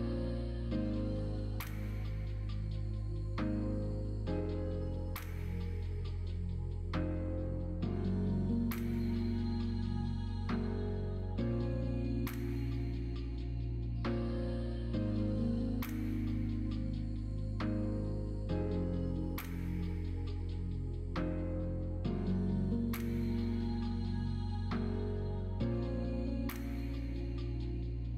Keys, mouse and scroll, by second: 0.3 middle click, 1.9 e, 4.0 ctrl+middle click, 4.3 ctrl+z, 4.5 middle click, 5.8 click, 6.8 shift+click, 8.6 e, 11.1 click, 11.3 middle click, 11.6-12.9 middle drag, 13.2 middle click, 13.8 middle click, 14.2 shift+middle click, 14.6 middle click, 14.9 middle click, 16.2 middle click, 17.2 middle click, 18.1 middle click, 19.4 middle click, 20.2 middle click, 20.7 shift+s, 23.9 middle click, 24.3 shift+a.